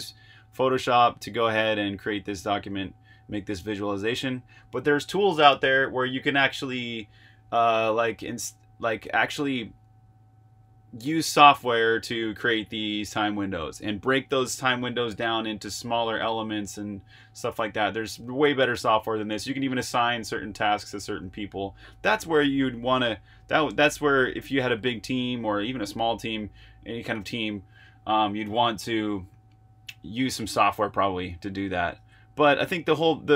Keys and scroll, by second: 32.0 super+Tab.